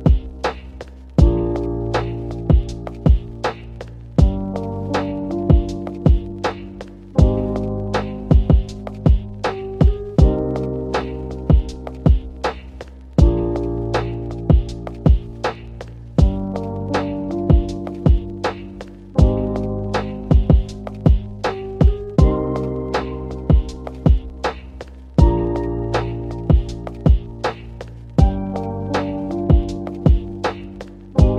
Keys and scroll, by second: 6.3-7.1 typing, 20.7-21.1 typing, 30.2 space.